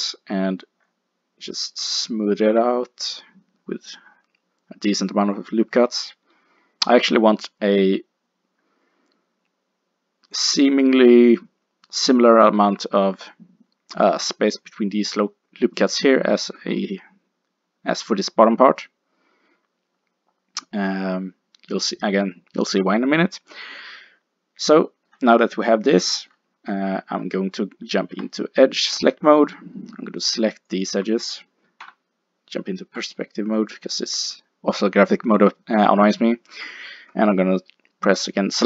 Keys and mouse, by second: 12.1 click, 14.0 middle click, 24.8 middle click, 28.0 ctrl+Tab, 30.7 click, 31.8 KP_5, 32.4 middle click.